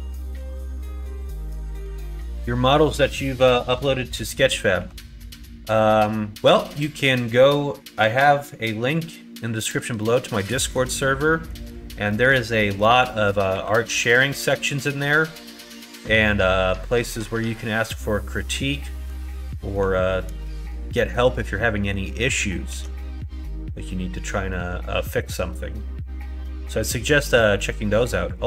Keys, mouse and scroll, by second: 1.7 click, 4.7 2, 10.0 shift+middle click, 10.8 middle click, 11.3 middle click, 12.1 middle click, 12.6 middle click, 13.0 middle click, 13.5 2, 14.6 click, 16.2 middle click, 18.9 middle click, 20.4 shift+middle click, 20.8 middle click, 21.7 middle click, 22.7 ctrl+b.